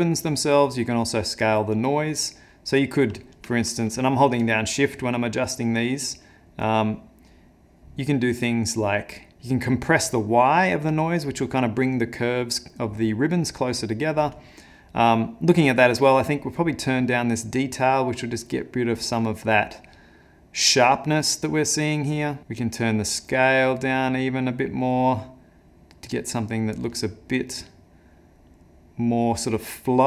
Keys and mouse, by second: 5.0 shift+click, 16.4 shift+click, 22.5 shift+click.